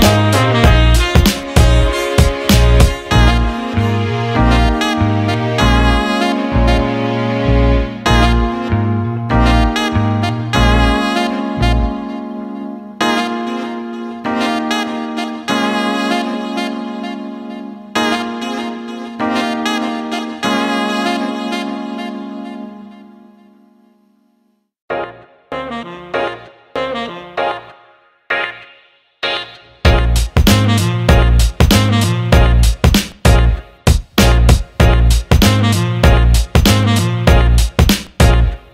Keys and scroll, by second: 1.5-3.1 typing, 4.7 Escape, 9.3 Escape, 27.1 ctrl+z, 31.2 Escape, 32.5 Escape, 33.8-35.1 typing.